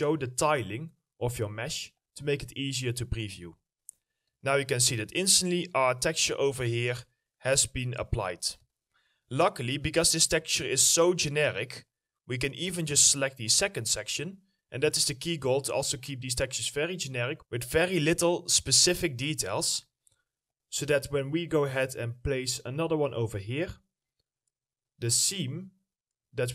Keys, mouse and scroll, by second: 0.0-0.9 scroll up 1, 0.9 middle click, 1.7 ctrl+click, 4.1 alt+middle click, 5.7 alt+middle click, 8.4 alt+middle click, 13.4 alt+middle click, 15.7-16.3 scroll down 1, 16.3 middle click, 17.2 scroll up 1, 19.6 middle click, 21.1-24.0 scroll up 1, 24.1-24.6 scroll down 1, 24.6 middle click, 25.7-26.1 scroll down 1.